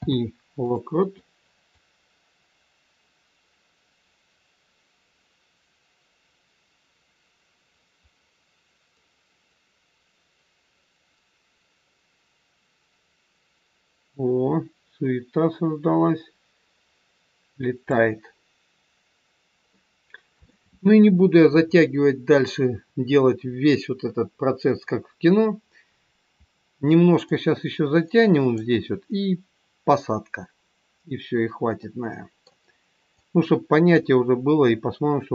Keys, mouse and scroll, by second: 0.0 i, 1.8 click, 18.7 scroll down 2, 19.7 middle click, 27.3 click, 31.8 middle click, 33.1 click.